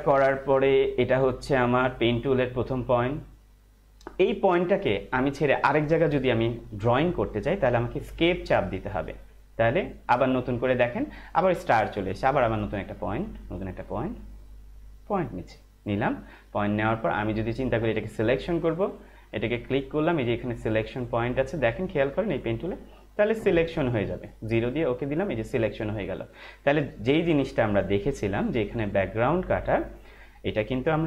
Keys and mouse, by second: 4.3 click, 8.7 Escape, 12.9 click, 18.6 click, 21.2 click, 28.8 click, 30.0 click.